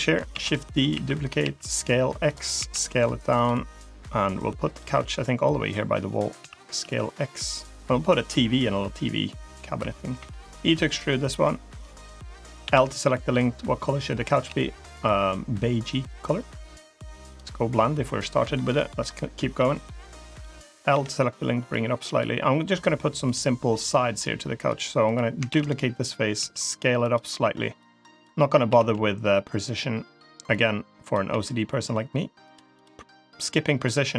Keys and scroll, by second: 0.2 shift+d, 0.8 s, 2.4 s, 6.2 s, 10.0 e, 12.5 l, 14.3 g, 20.8 l, 25.3 shift+d, 26.2 s, 28.5 s, 31.1 e.